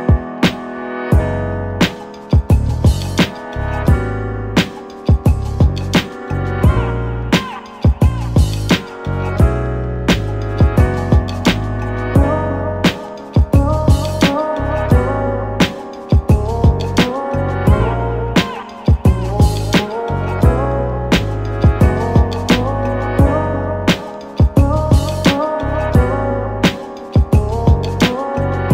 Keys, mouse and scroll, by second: 3.2 click, 5.1-8.8 drag, 8.8-10.1 scroll down 4, 10.1-16.7 drag, 16.7-18.1 middle drag, 18.1-19.0 scroll down 8, 20.5 ctrl+shift+click, 25.8-28.1 middle drag, 28.2-28.7 scroll up 2.